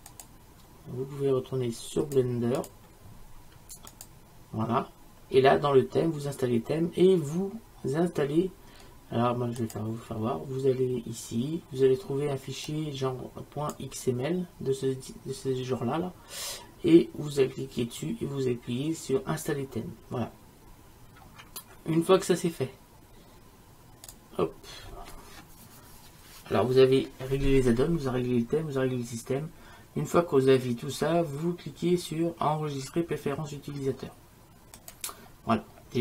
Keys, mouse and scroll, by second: 2.7-4.7 drag, 4.7-7.4 middle drag, 11.4-12.8 middle drag.